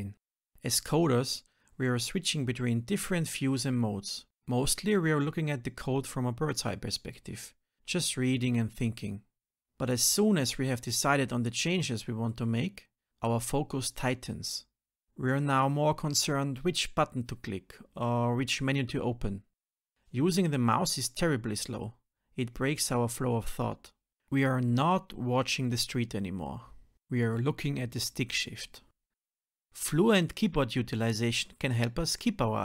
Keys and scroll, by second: 0.4 F6, 0.9 Down, 3.4 ctrl+alt+n, 5.1 ctrl+alt+n, 7.4 ctrl+alt+n, 9.7 shift+F6, 10.1 Return, 17.6 ctrl+alt+m, 20.7 alt+Return, 27.8 shift+F10, 32.1 ctrl+alt+v.